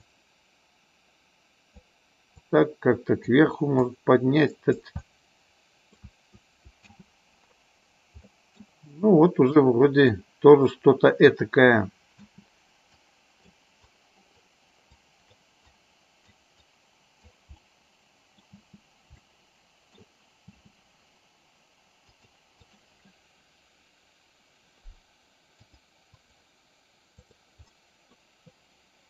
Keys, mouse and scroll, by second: 0.0-1.9 drag, 2.4 click, 3.7-4.8 drag, 5.0 middle click, 6.8 space, 8.3 middle click, 9.6 click, 12.4 space, 13.1 click, 13.8 click, 15.0 click, 15.6 click, 16.6 click, 17.6 middle click, 18.5 space, 19.1 middle click, 20.6 space, 22.1 click, 25.6 click, 27.8 middle click.